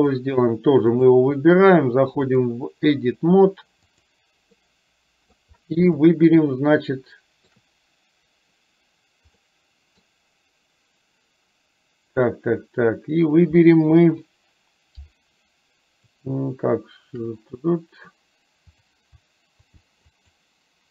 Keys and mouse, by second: 0.1 click, 1.1 click, 2.3-4.2 drag, 4.7 middle click, 5.9-7.6 shift+middle drag, 9.4 middle click, 18.8 click, 19.8 shift+a, 20.2 alt+shift+click.